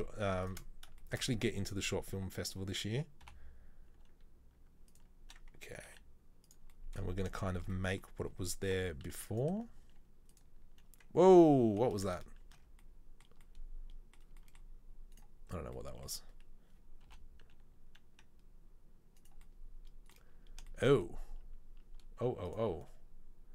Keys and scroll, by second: 4.7 i, 5.9 e, 8.8 i, 10.1 e, 12.1 ctrl+z, 12.6 ctrl+z.